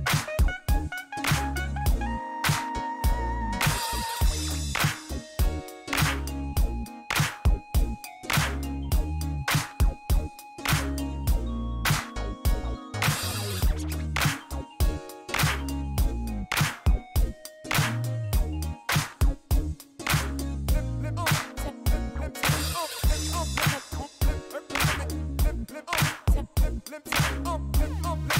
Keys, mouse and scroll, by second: 0.2 click, 0.9 click, 1.9 shift+right click, 7.0 shift+right click, 8.1 middle click, 8.6 shift+right click, 9.7 shift+right click, 11.5 click, 12.3 ctrl+click, 13.8 ctrl+click, 14.6 ctrl+click, 15.9 click, 17.7 click, 19.0-19.4 scroll up 4, 20.0 shift+right click, 21.7 click, 22.8 click, 24.0 click, 24.9 click, 26.6 click, 27.9 shift+right click.